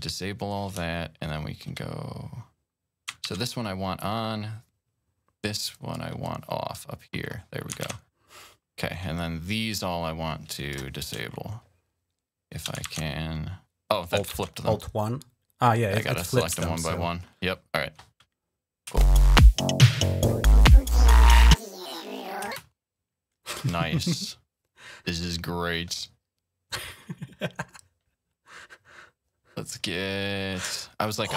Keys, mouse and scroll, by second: 0.8-1.1 shift+scroll up 2, 3.1 alt+1, 3.8-5.0 drag, 5.6-6.9 drag, 7.7 1, 9.0-11.0 drag, 11.2-12.1 shift+scroll up 1, 12.7 alt+1, 14.1 alt+1, 14.7 click, 15.5 click, 16.4 alt+1, 18.6 click, 18.8 space, 21.5 click, 22.1 click, 22.3 space, 24.5 right click.